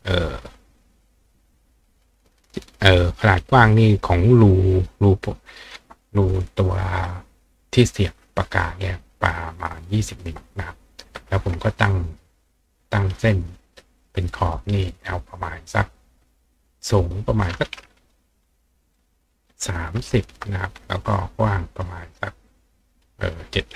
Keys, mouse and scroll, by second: 0.5-2.6 drag, 12.4 click, 13.2-15.2 drag, 17.2 click, 18.2 click, 21.2 click.